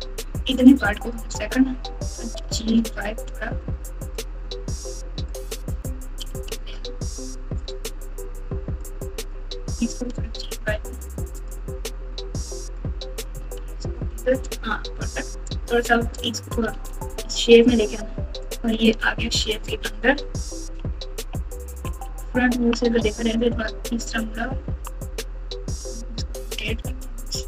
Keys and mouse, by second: 0.7 click, 2.4 g, 5.3 click, 6.2 g, 8.7 click, 8.9 click, 9.8 g, 12.5 click, 13.3 g, 15.4 click, 15.6 click, 16.6 g, 18.4 click, 19.3 alt+z, 20.0 Tab, 20.6-22.8 typing, 24.2 Tab, 24.6 Tab, 25.8 r.